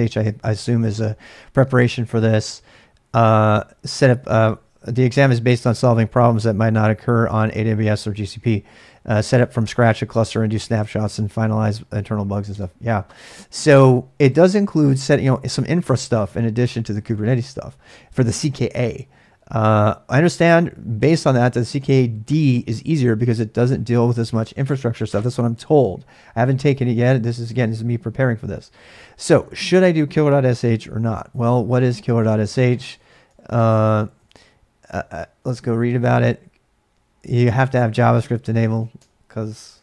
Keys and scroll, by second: 12.5 space, 30.5 ctrl+a, 30.6 ctrl+a, 31.9 ctrl+a, 32.2-35.9 typing, 39.0-39.7 typing, 39.7 alt+Tab.